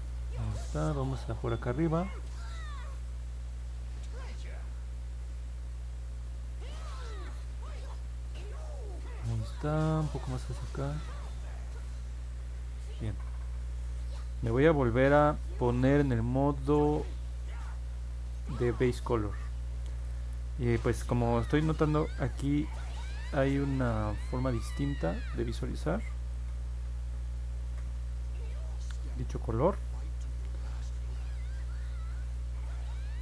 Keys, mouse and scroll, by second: 2.0-9.0 drag, 11.1-12.7 drag, 24.7 middle click, 24.7-25.4 scroll down 2, 25.2 middle click, 26.3-29.8 alt+drag, 30.0 middle click, 30.5 middle click, 31.5 alt+middle click, 32.6 scroll up 1, 32.9 middle click.